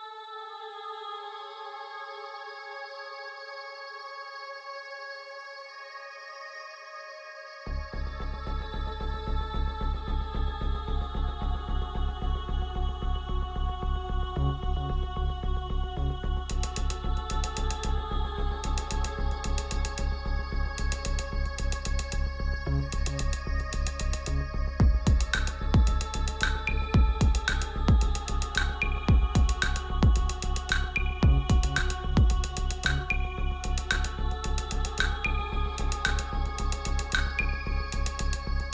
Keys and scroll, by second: 25.9 shift+Up, 29.9 ctrl+x, 32.3 ctrl+f.